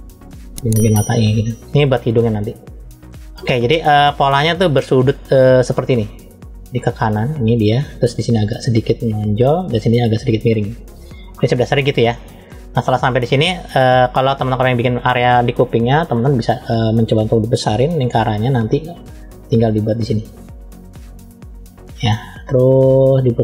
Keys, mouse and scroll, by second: 1.7-2.1 scroll up 1, 2.5 middle click, 4.1 middle click, 6.5 click, 10.6-12.0 middle drag, 12.9-13.5 scroll down 1, 13.5 middle click, 15.6 KP_3, 17.7 f, 19.4 click.